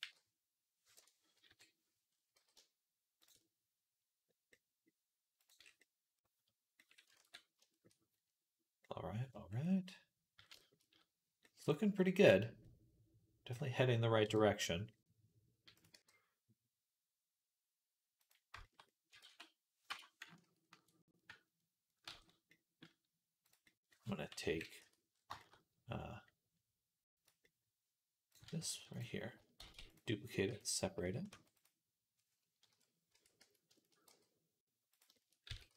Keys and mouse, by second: 1.3 KP_3, 2.2 g, 3.1-14.1 shift+middle drag, 7.0 ctrl+s, 14.1 KP_1, 14.7-17.2 middle drag, 15.8 g, 17.2-18.7 drag, 18.8-30.3 ctrl+drag, 19.1 s, 22.0 ctrl+s, 24.3 KP_1, 24.6 Tab, 29.4 shift+d, 30.3 p, 31.1 Tab, 32.5 middle click, 32.5 KP_1, 33.0 Tab, 33.2 a, 33.7-34.9 shift+middle drag, 33.9 g, 34.9-35.7 shift+drag, 35.3 s.